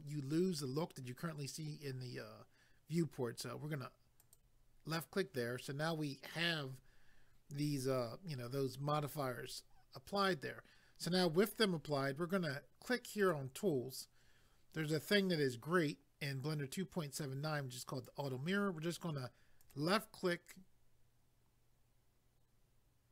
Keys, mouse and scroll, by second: 4.2 click, 13.2 click, 15.3 click, 19.6 click.